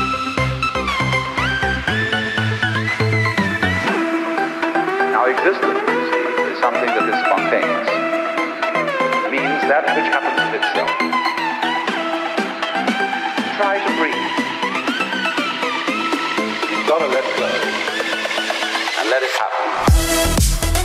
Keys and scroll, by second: 1.0 ctrl+z, 8.1 ctrl+z, 10.8 ctrl+=, 17.3 ctrl+-.